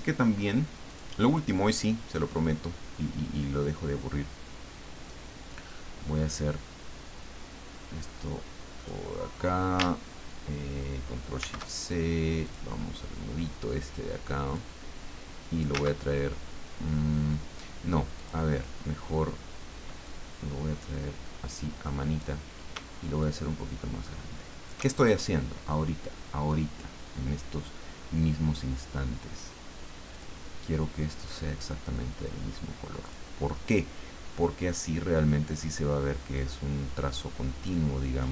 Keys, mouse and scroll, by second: 0.9 click, 5.5-9.4 drag, 11.4 ctrl+shift+c, 12.4 click, 14.5-15.8 drag, 15.8 ctrl+z, 18.2 click, 20.0-22.4 drag, 23.2-25.1 shift+drag, 30.1 click, 31.2 click, 33.0 click, 36.3-38.3 drag.